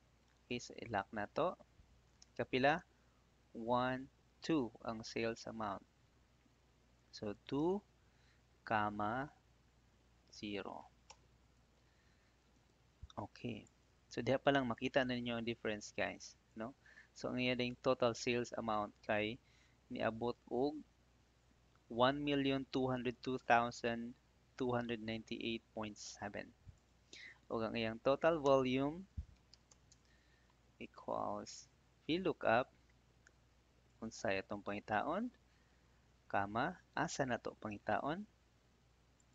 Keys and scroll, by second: 1.2 F4, 2.1 ,, 7.5 2, 9.1 /, 11.0 Return, 14.6 ctrl+d, 29.0 =, 29.8 Tab, 35.2 '.